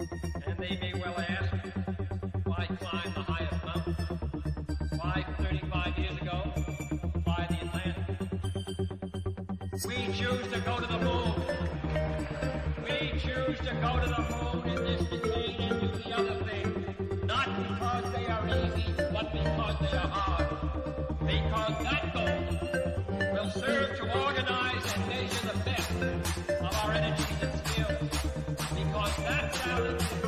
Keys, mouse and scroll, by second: 0.6 click, 2.3-3.1 scroll down 1, 6.4-7.3 scroll down 1, 8.2 middle click, 8.8-9.8 scroll down 1, 12.8 scroll up 1, 15.7 click, 16.5-16.8 scroll down 1, 17.1-18.9 middle drag, 18.9 ctrl+click, 23.7 click, 28.2 middle click, 29.1 click, 29.6 scroll down 1.